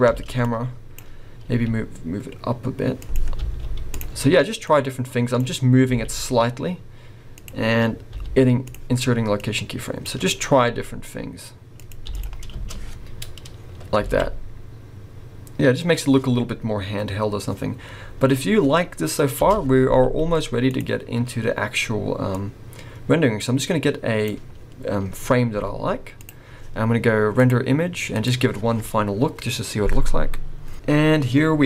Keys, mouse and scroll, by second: 0.1 space, 0.4 click, 1.4 g, 3.3 i, 4.6 click, 5.9 g, 8.1 i, 9.4 click, 10.7 g, 12.0 i, 12.5 space, 13.5 scroll down 2, 14.0 alt+a, 19.4 space, 20.0 z, 22.5 click, 24.7-25.4 scroll up 1, 25.7 z, 27.4 click.